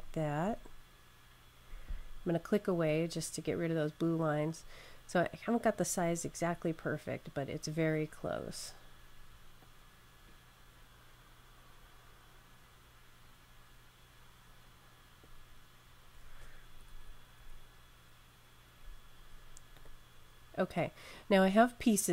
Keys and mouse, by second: 0.3 Left, 2.7 click, 5.6 Left, 5.6 click, 16.8 Left, 16.9 Left, 17.3 Left, 19.7 click.